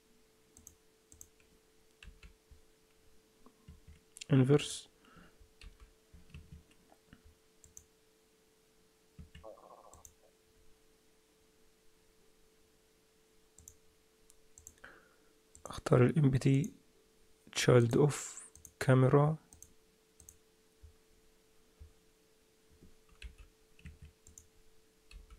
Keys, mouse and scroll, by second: 0.5 click, 1.6 click, 2.0 g, 4.6 click, 5.6 g, 7.6 click, 9.9 click, 13.6 click, 14.6 click, 15.5 click, 16.5 click, 23.2 g, 24.2 click, 25.1 g.